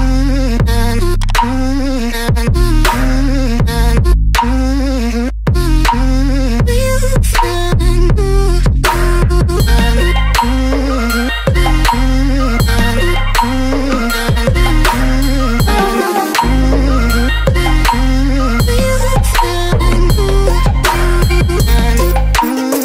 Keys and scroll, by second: 4.8 Return, 16.9 d, 17.8 ctrl+y.